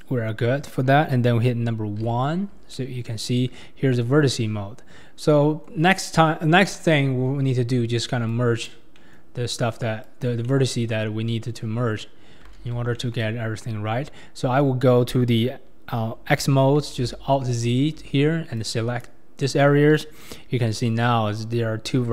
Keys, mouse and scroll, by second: 0.0 click, 2.1 1, 2.6 scroll down 1, 2.8 middle click, 3.6 scroll down 1, 3.8-4.5 scroll up 4, 3.9 click, 3.9 middle click, 3.9 right click, 4.5 scroll down 3, 5.1 scroll up 2, 5.3 middle click, 5.8 scroll down 4, 6.9 ctrl+KP_3, 7.6 scroll up 3, 8.3 click, 9.0 middle click, 9.3-9.7 scroll down 4, 10.0 click, 10.5-12.6 middle drag, 12.6 alt+z, 13.0-16.1 middle drag, 17.0 alt+z, 17.6 alt+z, 18.6 click, 20.2-21.9 drag, 20.2-21.9 middle drag, 20.2-21.9 right drag.